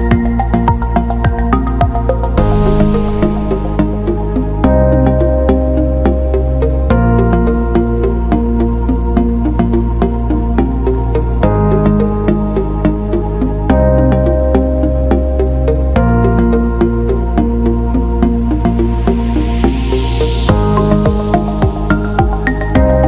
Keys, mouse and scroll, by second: 0.7 click, 1.4 click, 2.4 alt+middle click, 3.1 alt+middle click, 4.3 click, 4.9 alt+middle click, 5.8-16.0 drag, 16.3 alt+middle click, 17.4 Tab, 18.2 click, 18.3 click, 19.4 click, 20.7 alt+middle click, 21.3 click, 22.2 alt+middle click, 22.8 alt+shift+middle click.